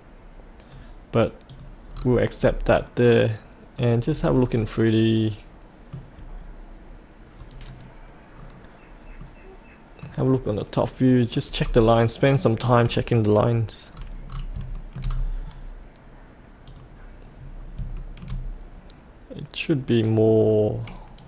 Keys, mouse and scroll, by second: 1.9-2.4 scroll up 1, 2.8 middle click, 4.0 scroll up 1, 4.6-6.2 middle drag, 6.2-9.1 scroll down 1, 9.1-10.8 middle drag, 11.2 click, 11.5-12.3 scroll down 1, 12.3 click, 13.9-14.2 scroll up 1, 14.2 scroll down 1, 14.7 shift+middle click, 15.0-16.6 scroll down 1, 16.6 click, 17.3-17.7 scroll down 1, 17.9-18.9 shift+middle drag, 20.0 click.